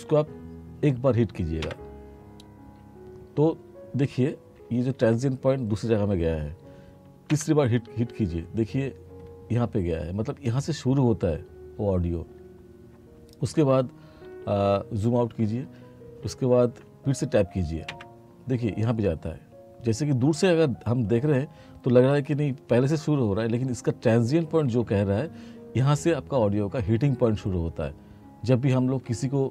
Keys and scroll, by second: 1.7 Tab, 4.6 t, 7.3 Tab, 14.3 r, 17.9 Tab, 24.5 t.